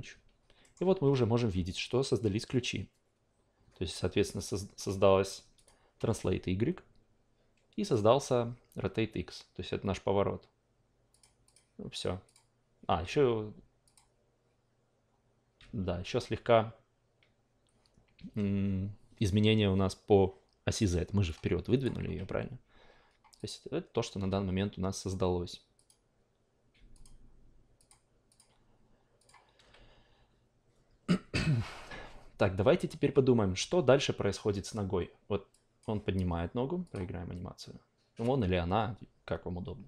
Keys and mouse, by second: 0.6 alt+middle click, 1.0 a, 4.4 click, 5.6 click, 7.8 click, 11.1-15.8 drag, 15.8 a, 21.3-21.8 drag, 22.0 ctrl+z, 23.3 click, 24.2 a, 25.7-29.3 drag, 35.5 click, 36.8 click.